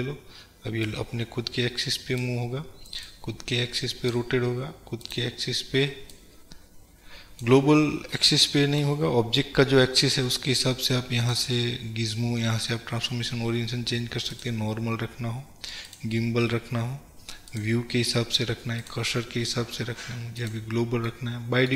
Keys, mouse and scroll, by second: 1.0-8.2 drag, 8.2-9.3 middle drag, 9.2 scroll up 2, 10.0-11.4 middle drag, 11.4-21.2 drag, 21.2-21.7 middle drag.